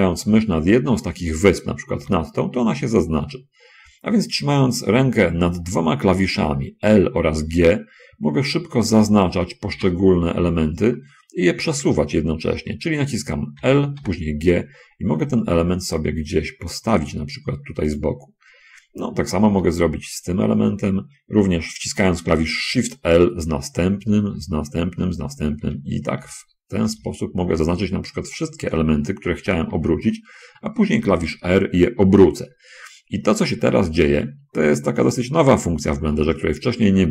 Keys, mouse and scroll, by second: 2.0 l, 9.3 l, 10.1 g, 11.6 Escape, 14.0 l, 14.3 g, 18.3 click, 20.0 l, 23.7 shift+l, 24.6 shift+l, 25.4 shift+l, 26.2 shift+l, 27.3 shift+l, 30.0 r.